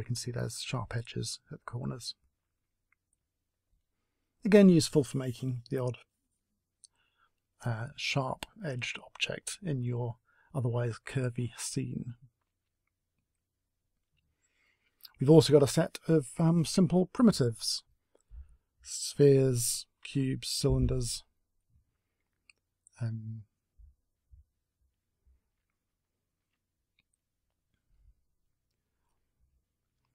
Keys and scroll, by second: 2.2 a, 10.7 Delete, 17.6 w, 24.4 a, 28.9 a.